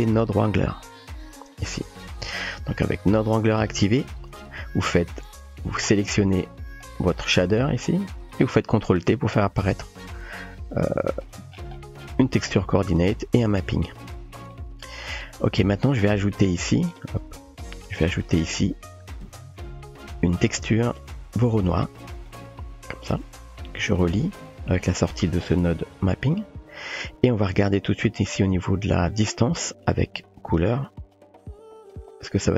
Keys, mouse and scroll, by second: 3.8 typing, 5.2-6.1 typing, 5.5-6.1 drag, 7.3 middle click, 8.2 drag, 10.3-10.9 drag, 10.9 typing, 11.8 middle click, 12.5-12.9 drag, 12.9 typing, 13.4 click, 14.0 typing, 14.7 middle click, 17.8 middle click, 19.1 shift+a, 22.6-23.4 typing, 24.8-26.3 drag, 27.2 click, 29.1-30.8 drag, 30.8 typing, 31.1-31.9 drag, 31.9 typing.